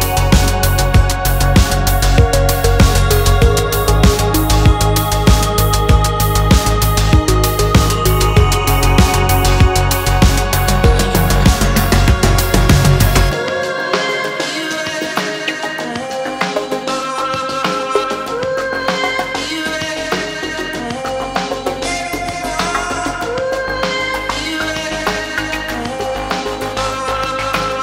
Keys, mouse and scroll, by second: 0.2-0.6 scroll down 7, 0.3 middle click, 0.6 shift+middle click, 0.9 a, 1.0 shift+middle click, 1.2 click, 1.3 KP_3, 1.4 Tab, 1.4 scroll up 3, 1.4 shift+middle click, 1.7 alt+click, 1.7 scroll down 3, 1.7 shift+middle click, 1.8 scroll up 4, 2.2 alt+shift+click, 2.8 shift+middle click, 2.9 scroll down 3, 2.9 shift+middle click, 3.0 scroll up 3, 3.2 shift+middle click, 3.3 alt+shift+click, 3.4 shift+middle click, 3.6 middle click, 3.9 alt+shift+click, 4.1 alt+shift+click, 4.2 middle click, 4.3 shift+click, 4.4 shift+click, 4.5 shift+middle click, 4.7 shift+click, 4.8 shift+click, 5.2 ctrl+e, 5.2 shift+click, 5.4 scroll down 2, 5.4 middle click, 5.7 scroll up 3, 5.7 alt+click, 6.0 shift+middle click, 6.3 shift+click, 7.1 ctrl+e, 7.1 shift+click, 7.2 scroll down 2, 7.3 a, 7.5 shift+middle click, 7.5 scroll up 2, 7.6 middle click, 7.7 click, 8.0 ctrl+e, 8.1 a, 8.2 scroll down 1, 8.3 shift+middle click, 8.4 alt+click, 8.7 shift+click, 8.9 shift+click, 9.0 shift+middle click, 9.4 shift+click, 9.5 shift+click, 9.7 ctrl+z, 9.8 ctrl+z, 9.9 shift+click, 10.0 shift+middle click, 10.1 ctrl+z, 10.3 scroll down 2, 10.4 shift+middle click, 11.6 scroll up 1, 11.9 shift+middle click, 12.0 shift+click, 12.1 ctrl+e, 12.3 scroll down 1, 12.4 middle click, 12.7 scroll up 1, 12.9 click, 13.0 scroll down 1, 13.1-14.0 shift+middle drag, 14.0 scroll up 2, 14.3 shift+click, 14.4 shift+middle click, 14.7 scroll down 2, 14.8 shift+middle click, 15.4 scroll up 4, 15.6 scroll down 1, 15.6 middle click, 15.8 Tab, 15.9 middle click, 16.0 ctrl+a, 16.4 click, 18.3 click, 19.0 click, 19.1 scroll down 1, 19.2 scroll up 2, 19.3 middle click, 19.5 Tab, 19.6-22.8 typing, 20.5 scroll down 1, 22.1 scroll up 2, 22.2 click, 23.9-27.8 typing, 24.8 shift+middle click, 24.9 scroll up 3, 25.1 click, 25.7 scroll up 1, 25.8 click, 27.4 click.